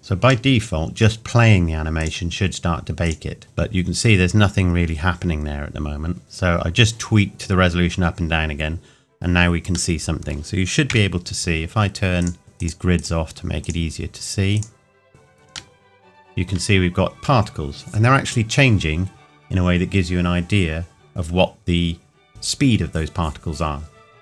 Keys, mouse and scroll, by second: 0.0 scroll down 1, 0.5 middle click, 1.3-1.7 scroll up 1, 2.0 click, 5.0-6.2 scroll down 1, 6.2 click, 10.0 middle click, 10.9 KP_1, 12.2 click, 15.8 shift+middle click.